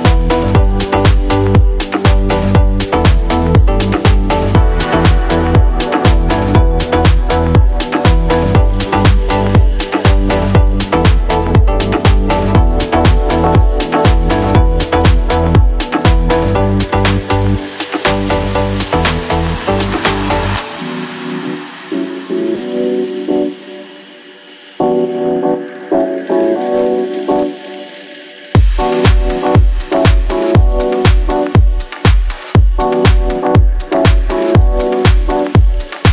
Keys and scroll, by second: 0.5 s, 1.8 1, 1.8 Return, 4.7-7.4 typing, 11.9-14.5 typing, 22.4 Return, 27.7 Left, 27.8 Right, 27.9-29.6 typing, 28.0 Return, 29.0 Return, 29.7 Return.